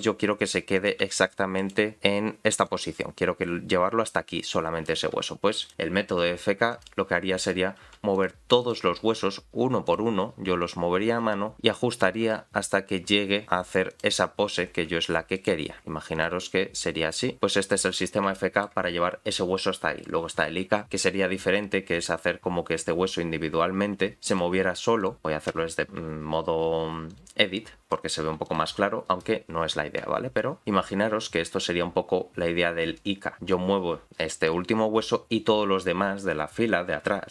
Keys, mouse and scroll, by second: 0.0 r, 1.0 g, 2.6-4.9 drag, 5.6 click, 6.1 r, 7.4 click, 7.8 r, 8.6 click, 9.0 r, 10.6 click, 11.1 r, 12.0 click, 12.2 r, 13.9 click, 14.7 r, 15.7-16.1 scroll down 3, 15.8 shift+middle click, 16.1 click, 16.7 r, 18.0-18.3 scroll up 4, 18.3 shift+middle click, 19.4 click, 21.9 click, 24.3 click, 25.4-25.8 scroll down 2, 25.9 shift+middle click, 27.1 click, 28.4 click, 30.6 g.